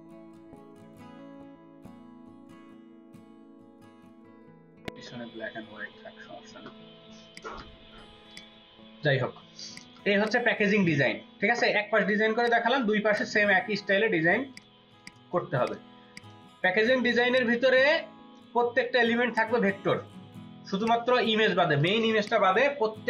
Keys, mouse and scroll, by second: 7.2 ctrl+alt+click, 8.2 ctrl+click, 9.0 space, 9.6 ctrl+alt+click, 10.8 space, 14.4 ctrl+click, 15.4 space, 22.2 double click.